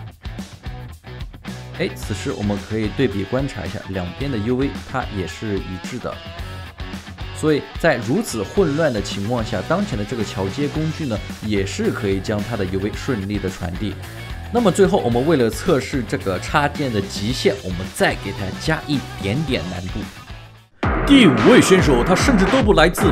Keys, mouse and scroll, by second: 2.0 alt+right click, 4.2 alt+middle click, 4.6 alt+right click, 6.3 alt+right click, 7.1 alt+middle click, 7.9 alt+right click, 8.3 alt+middle click.